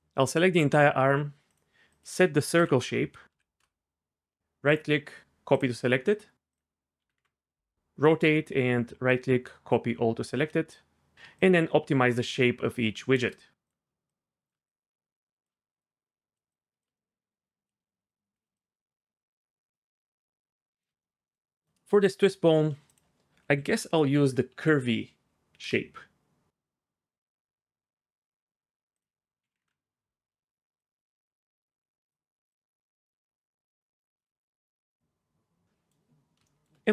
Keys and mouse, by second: 1.5 click, 2.0-3.6 drag, 4.7 right click, 6.5 click, 8.2 right click, 10.7 shift+click, 11.3-13.2 shift+drag, 13.6 click, 14.1 shift+click, 14.7 shift+click, 15.8 click, 16.5 shift+click, 17.6 click, 18.1 shift+click, 18.6-19.7 shift+drag, 20.2 shift+click, 21.0 middle click, 22.9-25.7 drag, 24.7 Down, 29.1 click, 30.8-32.1 shift+drag, 32.5-34.2 shift+drag, 35.6 Tab, 35.6-36.1 middle drag.